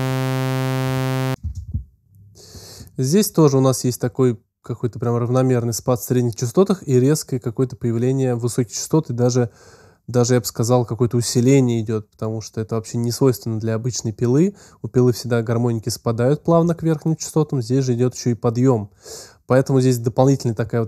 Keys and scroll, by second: 1.2 space, 2.2 space.